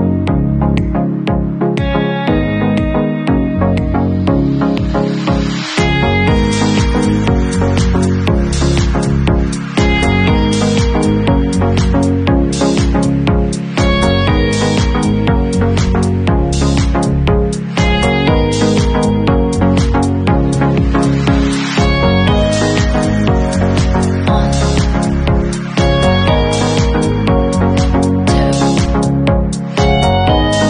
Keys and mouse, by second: 1.3 ctrl+super+t, 2.1 ctrl+super+r, 2.2 ctrl+super+y, 12.1 alt+middle click, 12.4-13.1 alt+drag, 13.1-14.3 middle drag, 14.3 click, 15.1-21.1 middle drag, 15.9 Tab, 18.9 Tab, 19.8 ctrl+super+r, 20.0 ctrl+super+y, 21.1-30.6 drag.